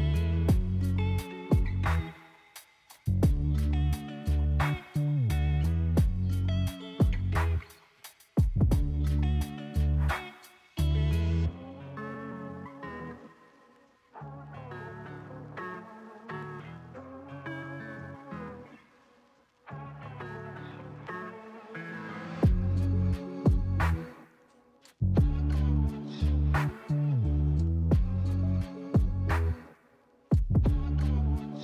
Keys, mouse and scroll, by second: 0.7 click, 4.7-6.0 drag, 8.3 click, 9.5 click, 9.8-12.8 middle drag, 13.3-15.9 middle drag, 15.9 click, 16.7 click, 18.5 click, 18.7-20.9 middle drag, 20.9 ctrl+z, 22.5 click, 23.3 click, 28.7 click, 29.4 click, 30.4 click, 31.2 BackSpace.